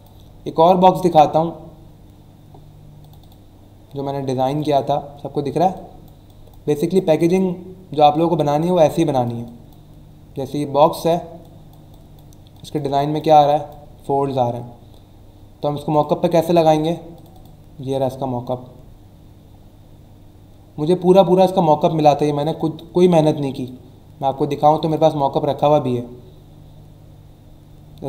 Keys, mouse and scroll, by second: 3.0 click, 4.5 click, 5.1 scroll up 1, 5.7 click, 7.6 scroll down 1, 8.1 click, 10.0-11.0 scroll up 3, 11.4 click, 14.0-15.0 scroll down 3, 15.9 click, 17.1 click, 17.5 click, 18.9 scroll up 1, 19.5 scroll up 1, 19.9-20.4 scroll down 2, 20.9-21.3 scroll up 2, 21.6 click, 23.5 click, 24.7 click.